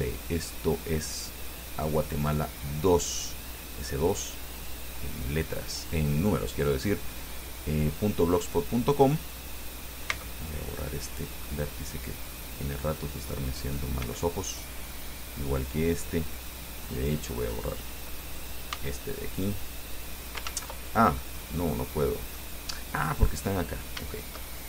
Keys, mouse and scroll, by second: 2.0 click, 8.6 right click, 10.3 x, 12.5 click, 13.8 right click, 14.2 x, 14.7 click, 17.2 right click, 18.9 x, 19.6 click, 20.7 ctrl+z, 21.7-22.8 middle drag, 23.3 right click, 24.3 shift+right click.